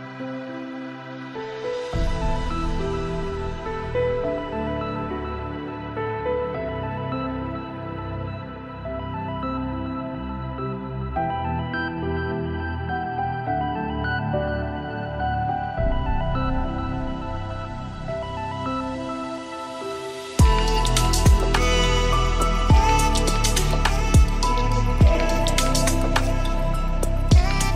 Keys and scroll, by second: 13.0 ctrl+z.